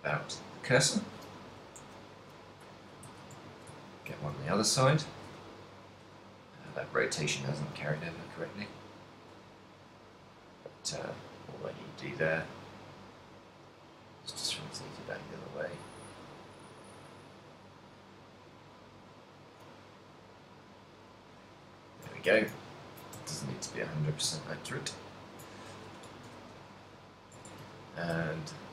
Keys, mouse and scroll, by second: 0.2 click, 1.8 ctrl+m, 2.9 click, 3.2 z, 3.5 shift+middle click, 3.9 ctrl+middle click, 4.4 r, 5.3 right click, 6.2 click, 6.8 click, 8.6 r, 21.7 click, 22.2 a, 22.5 z, 22.8 ctrl+middle click, 23.3 z, 23.7 middle click, 24.5 z, 24.7 middle click, 25.7 ctrl+middle click, 26.3 KP_1, 27.2 right click, 27.6 Tab, 27.9 ctrl+middle click.